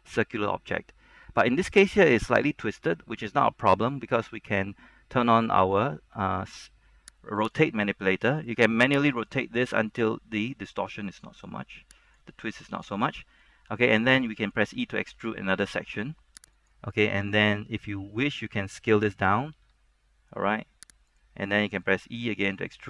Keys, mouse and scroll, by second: 7.5 shift+click, 8.3 middle click, 9.3 click, 12.5 middle click, 13.8-14.8 scroll up 1, 14.8 e, 16.7 click, 17.5 middle click, 19.7 s, 21.2 click, 22.1 e.